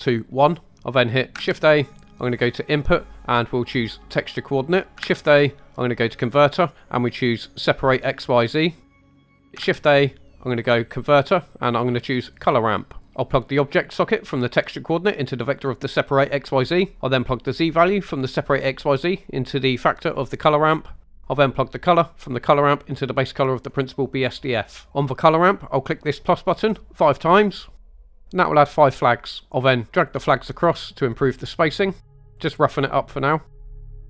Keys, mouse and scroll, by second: 1.4 shift+a, 5.0 shift+a, 9.6 shift+a, 14.2-15.7 drag, 17.9-20.1 drag, 20.9-23.8 drag, 28.1 click, 32.0-32.7 drag, 33.6-34.0 drag.